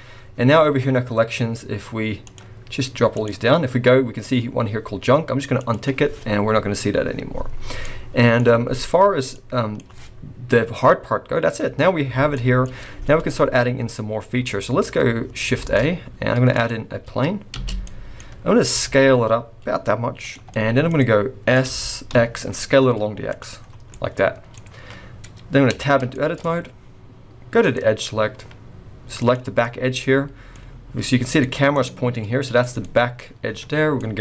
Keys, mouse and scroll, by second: 1.0-1.5 scroll down 3, 1.5-2.2 scroll up 2, 2.2 click, 2.6-3.0 scroll up 1, 3.1 click, 5.5 click, 7.3-7.8 scroll down 3, 7.8 middle click, 9.0 scroll down 2, 9.3 middle click, 12.7 scroll up 1, 13.2 middle click, 14.4 middle click, 15.6 shift+a, 17.0-17.4 scroll down 2, 17.5 space, 17.9 middle click, 18.5 scroll down 1, 18.7 s, 20.5 middle click, 20.9 middle click, 21.6 s, 23.5-23.9 scroll down 5, 23.9 middle click, 24.5-25.2 scroll up 2, 25.2-25.6 scroll up 1, 25.6 scroll down 1, 25.7 Tab, 26.1 shift+middle click, 27.6 click, 29.2 click, 29.6 middle click, 30.5-31.4 scroll up 3, 31.4 middle click, 32.8 middle click, 33.6-34.0 scroll down 2, 34.0 middle click.